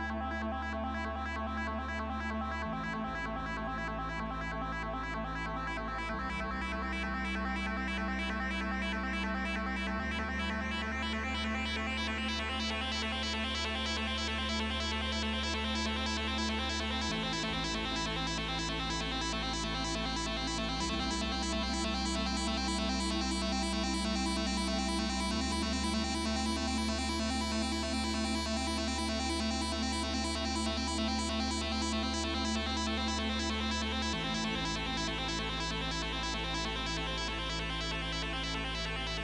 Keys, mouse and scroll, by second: 15.5 double click, 25.9-27.8 typing, 27.9 Return.